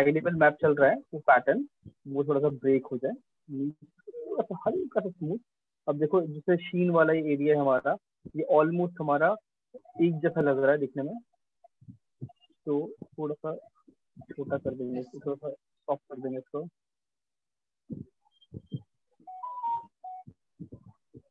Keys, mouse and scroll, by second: 2.2 click, 3.2 click, 4.2 click, 5.2 alt+click, 7.2 click, 8.2 alt+click, 11.2 click, 13.2 click, 14.2 click, 19.2 click, 20.2 click.